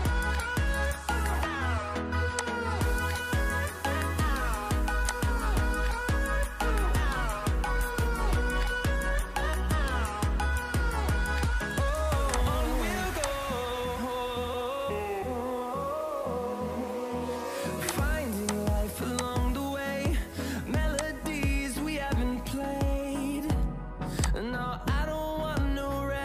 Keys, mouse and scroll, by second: 12.2 shift+click.